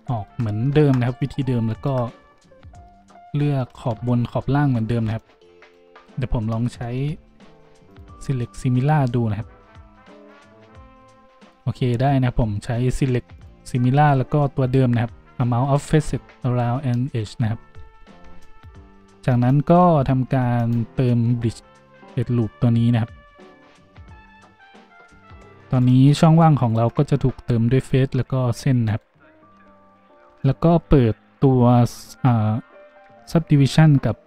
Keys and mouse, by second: 1.0-33.3 ctrl+drag, 3.7 z, 5.1 middle click, 5.1 right click, 5.6 right click, 24.1 z, 28.8 middle click, 28.8 right click, 28.8 a, 29.5 a, 33.3-34.2 middle drag, 34.2 click.